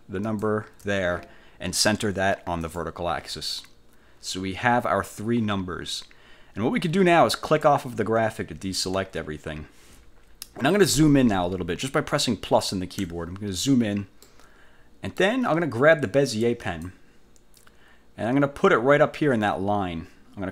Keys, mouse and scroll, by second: 0.4 shift+click, 2.7 click, 7.5 click, 9.1 1, 12.5 =, 14.3-15.5 middle drag, 16.7 click.